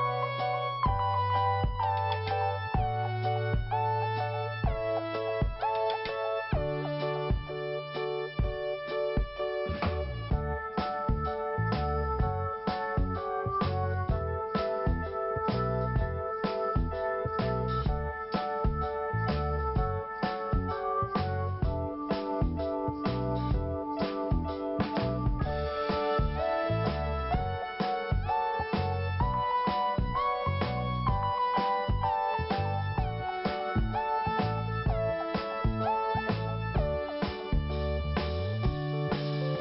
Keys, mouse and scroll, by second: 0.2-0.6 scroll down 1, 1.9 click, 2.8 click, 5.8-6.3 scroll down 1, 7.1 click, 7.3 click, 7.3 double click, 7.5 double click, 7.6 double click, 7.7 double click, 9.3 click, 9.5 double click, 10.2-10.6 scroll down 1, 11.5 scroll up 1, 14.7 click, 17.3 click, 23.8-24.1 scroll down 1, 25.1 click, 25.6 scroll up 2, 26.1 click, 26.7 click, 28.3 click, 29.5 scroll down 2, 30.8 scroll up 2, 33.4 scroll down 1, 33.7 click, 34.9 click, 38.1 click, 39.0 click.